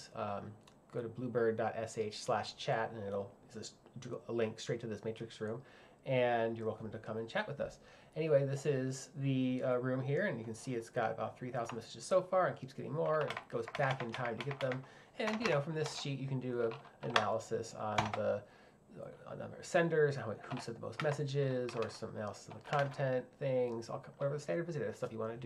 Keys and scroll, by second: 15.3 l, 15.9 h, 18.0 shift+f, 21.0-23.3 typing.